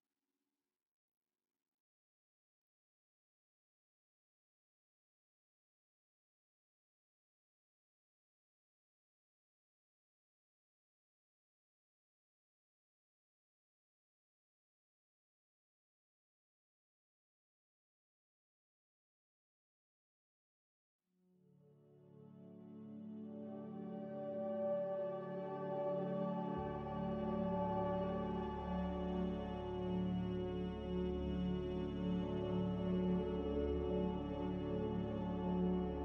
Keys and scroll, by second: 0.0-0.6 typing, 5.3-6.1 typing, 15.6 a, 16.2 Delete, 16.8 Delete, 17.7 Delete, 20.6 ctrl+z, 24.4-25.0 typing, 28.4-29.5 typing.